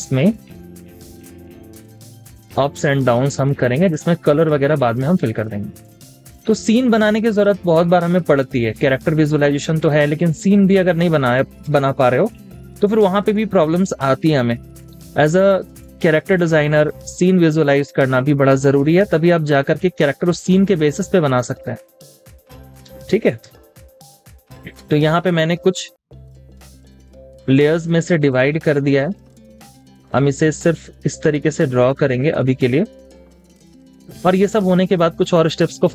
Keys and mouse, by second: 11.3 Escape, 11.6 space, 21.4 Escape, 21.9 space, 23.4 space, 29.8 double click, 33.0 Escape, 33.3 space.